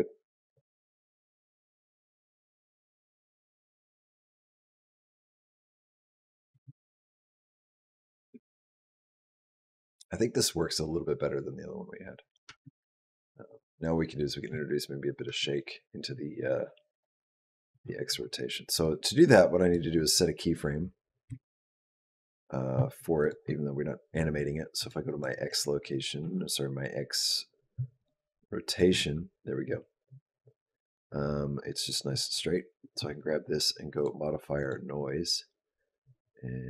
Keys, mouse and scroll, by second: 6.3 space, 7.4 click, 12.3 space, 15.1 space, 16.7 click, 18.7 click, 21.1 i, 23.0 click, 24.6 click, 24.9 click, 27.8 click, 28.5 click, 33.8 click.